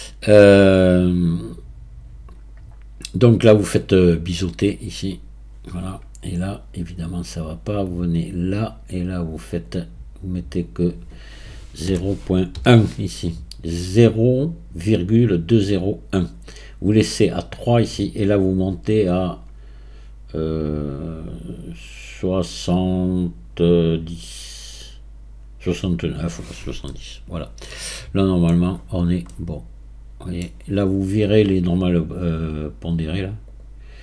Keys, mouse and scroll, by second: 4.7-7.7 drag, 8.3 click, 9.6-15.8 drag, 18.4-21.6 drag, 26.9-28.8 middle drag, 28.8 scroll up 5, 29.3-30.5 middle drag, 30.5-31.1 scroll down 3, 31.1-33.5 scroll down 1, 33.5-34.0 drag.